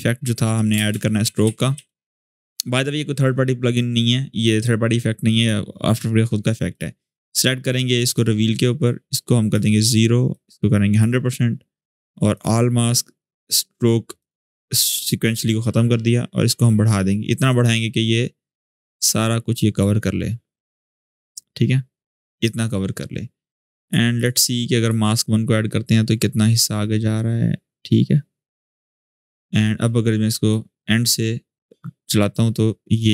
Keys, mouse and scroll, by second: 0.5 ctrl+space, 1.0-2.0 typing, 2.1 click, 5.1-9.5 drag, 10.1-11.0 drag, 12.1 click, 16.4-22.3 drag, 26.8-27.2 scroll down 1, 28.5-33.1 drag.